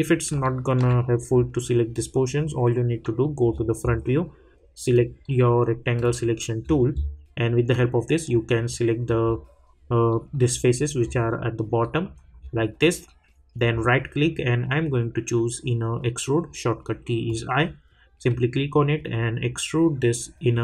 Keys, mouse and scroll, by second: 0.4-2.1 alt+middle drag, 3.4 scroll down 1, 4.9 click, 6.6 scroll up 1, 7.7-9.2 drag, 8.2 click, 9.2-10.1 scroll up 2, 10.1 middle click, 10.9 scroll up 1, 11.8 middle click, 12.4 scroll down 1, 13.6 right click, 17.2-20.6 drag.